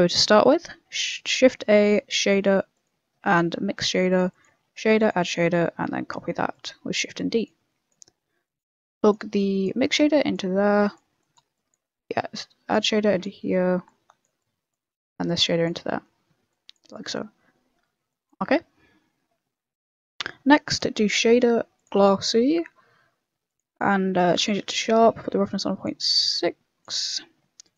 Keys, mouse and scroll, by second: 0.1 Delete, 0.4 middle click, 1.2 shift+a, 3.2 shift+a, 4.5 shift+a, 5.5 shift+a, 6.1 shift+d, 7.1 click, 7.7 click, 8.0 middle click, 8.4 click, 8.8 click, 9.9 click, 10.8 click, 11.5 click, 12.1 click, 13.8 click, 14.4 click, 15.9 middle click, 16.5 click, 16.9 middle click, 17.5 scroll down 1, 17.7 middle click, 18.1 click, 19.4 middle click, 20.0 middle click, 20.5 middle click, 20.9 shift+a, 22.4 shift+a, 24.0 middle click, 24.3 click, 25.2 click, 27.0 middle click, 27.6 click.